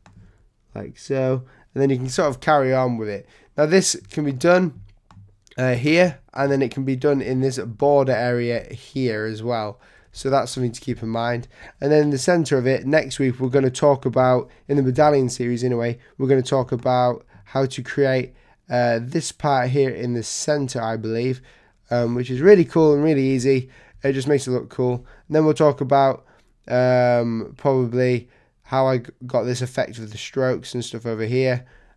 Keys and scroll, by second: 7.2 z, 8.6 space, 10.1 v, 10.9 super+0, 14.9 super+0, 16.6 z, 22.4 super+-.